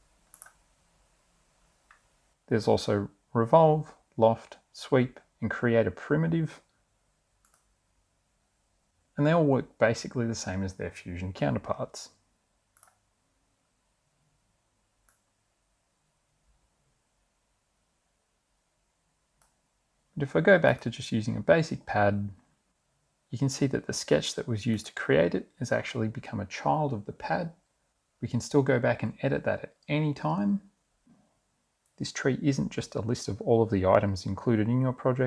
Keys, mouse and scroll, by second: 0.4 click, 2.0 middle click, 7.5 click, 12.9 click, 14.0 click, 16.9 click, 20.8 click, 24.8 click.